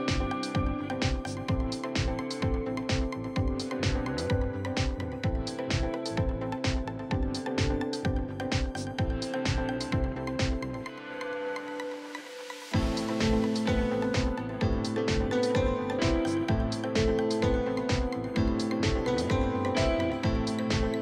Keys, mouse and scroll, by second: 0.4 shift+middle click, 0.8 scroll down 1, 1.1 scroll up 1, 1.4-2.6 shift+right drag, 2.6 click, 2.8-4.3 right drag, 4.3 shift+middle click, 5.2 click, 5.7 shift+right click, 6.4-7.5 drag, 8.1 middle click, 8.9 click, 9.4-10.4 middle drag, 10.4 right click, 11.2 scroll down 1, 11.4-11.8 scroll up 1, 11.8-12.9 right drag, 12.9 f, 13.5-14.6 drag, 14.8 middle click, 15.4 scroll down 3, 15.6 middle click, 16.2 click, 16.5 scroll down 1, 16.7 middle click, 17.6 scroll up 1, 17.7 middle click, 18.5 right click, 18.8 scroll down 2, 18.9 middle click, 19.4 scroll up 1, 19.6 shift+middle click, 19.8 scroll down 1, 20.1 middle click, 20.9-21.0 scroll up 2.